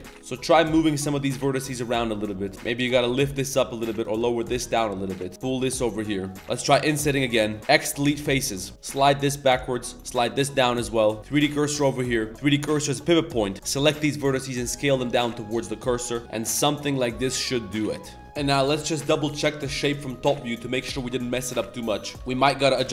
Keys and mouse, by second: 0.1 1, 0.1 g, 0.3 middle click, 0.6 ctrl+z, 1.2 click, 1.4 middle click, 1.8 g, 2.5 middle click, 3.4 middle click, 3.9 click, 5.5-6.2 middle drag, 6.3 middle click, 6.3 3, 7.4 middle click, 8.1 middle click, 8.5 middle click, 8.7 Tab, 8.7 1, 9.7 click, 11.0 middle click, 11.2 g, 11.3 shift+s, 12.1 click, 13.2 click, 13.8 middle click, 15.5 click, 16.2 Tab, 16.2-18.2 drag, 18.2 ctrl+s, 18.2 Tab, 18.2 shift+click, 18.2 KP_7, 18.2 1, 18.2 z, 18.6 Tab, 21.0 Tab, 21.1 1, 21.5 click, 22.3 g.